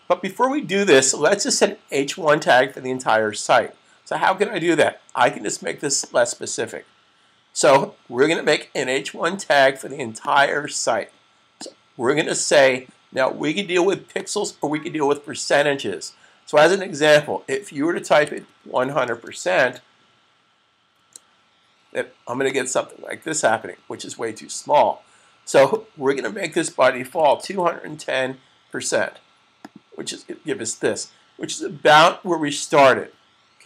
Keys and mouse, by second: 6.0 click, 10.1 click, 13.9 click, 18.1 1, 21.2-21.9 typing, 25.5 click, 28.5-29.3 typing.